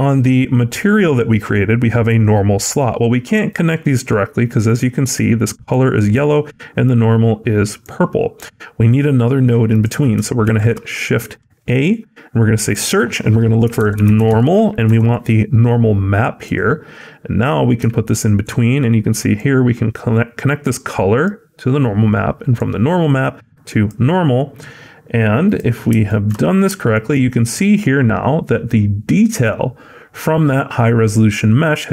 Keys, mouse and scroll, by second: 3.4 click, 10.3 shift+a, 19.2 click, 25.9 shift+middle click, 26.2-27.7 scroll up 8, 26.8 shift+middle click, 27.7 middle click.